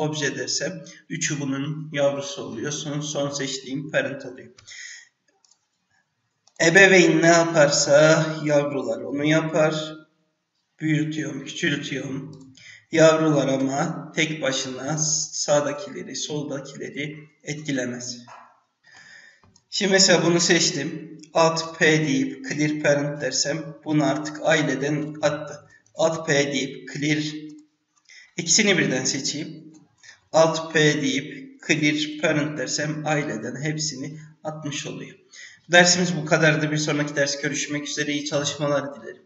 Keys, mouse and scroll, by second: 5.4 click, 6.4 click, 6.9 g, 9.6 s, 12.3 click, 13.5 g, 15.6 click, 16.1 g, 20.0 click, 21.6 alt+p, 24.3 click, 25.8 alt+p, 27.4 click, 29.2 shift+click, 30.7 alt+p, 33.5-35.0 scroll down 1.